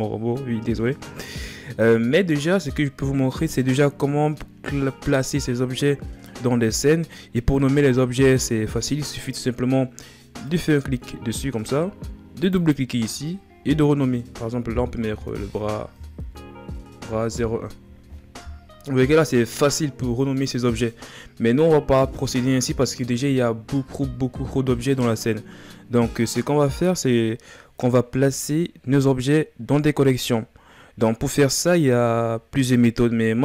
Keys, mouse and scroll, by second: 8.4-8.8 scroll up 3, 10.2-12.2 right drag, 12.2-22.8 drag, 22.8 scroll down 2.